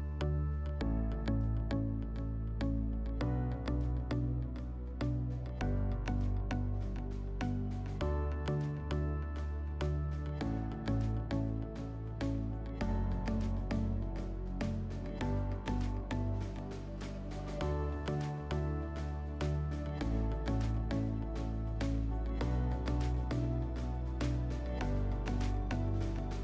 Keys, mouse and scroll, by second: 0.5 click, 1.0 click, 1.7 click, 2.6 click, 2.8 click, 3.2 click, 3.5 click, 3.9 click, 4.6 click, 5.3 click, 5.6 click, 6.3 click, 7.3 click, 8.8 click, 10.4 click, 10.7 click, 11.0 alt+middle click, 11.6 click, 11.8 click, 12.6 click, 12.9 click, 13.7 click, 15.3 alt+middle click, 15.9 click, 16.2 click, 16.4 click, 16.8 click, 17.1 click, 17.7 click, 18.0 click, 18.7 click, 19.3 click, 20.4 click, 21.2 scroll, 23.7 click, 24.2 click, 24.8 click, 24.9 click, 25.1 1, 25.2 Return, 25.8 click.